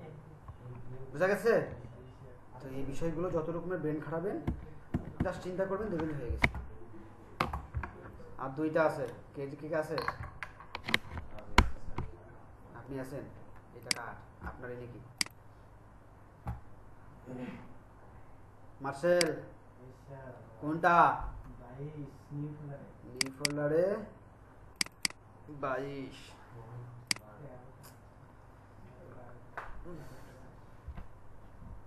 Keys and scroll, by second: 3.3 Right, 4.9 Right, 5.1 Right.